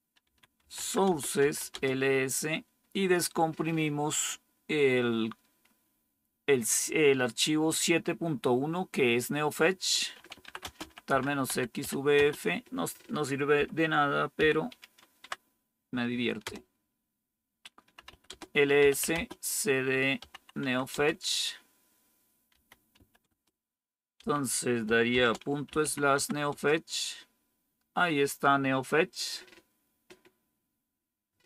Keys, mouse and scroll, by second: 0.0-2.0 typing, 9.8-12.2 typing, 13.4-14.6 typing, 15.1 Tab, 16.3 Return, 17.7-21.0 typing, 22.2-26.6 typing.